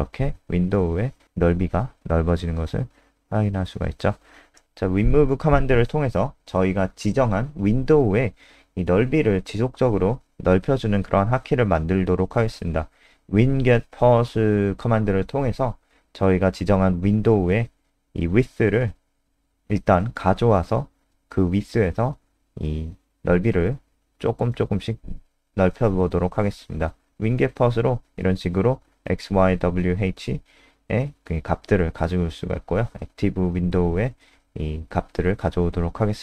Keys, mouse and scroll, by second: 0.9 click, 2.0 shift+Home, 2.5-6.1 typing, 6.2 Up, 10.0-12.7 typing, 12.9 Tab, 15.3 click, 15.4 click, 15.7 a, 16.7 shift+End, 16.9 BackSpace, 17.2 BackSpace, 17.6 shift+a, 18.7 click, 19.3 BackSpace, 20.6 Right, 20.8-21.8 Right, 21.8 ctrl+shift+Right, 22.1 w, 22.3 Escape, 22.6 Right, 22.8 Right, 23.3 h, 23.6 Escape, 23.9 ctrl+s, 33.1 click, 34.9 Return.